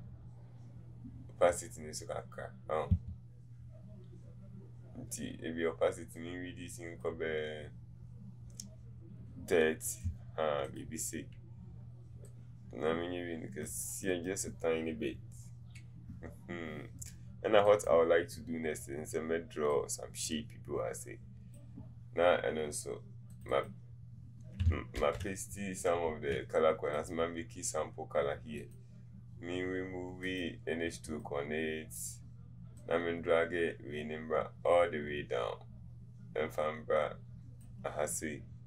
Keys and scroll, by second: 0.0 1, 3.1 1, 25.1 ctrl+v.